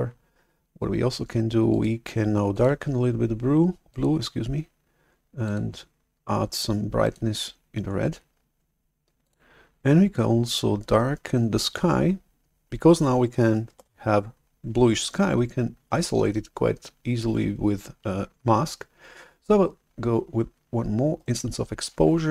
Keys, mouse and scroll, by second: 1.8-3.9 drag, 5.4 click, 6.9 click, 9.1 click, 13.8 shift+super+F11, 21.3 right click.